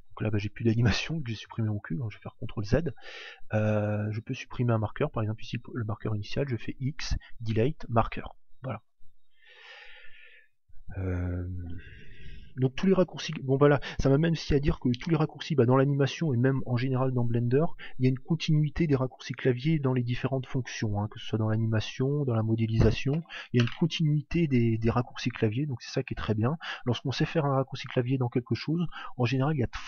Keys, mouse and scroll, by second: 1.9 ctrl+z, 3.5 click, 6.4 x, 9.3 ctrl+z.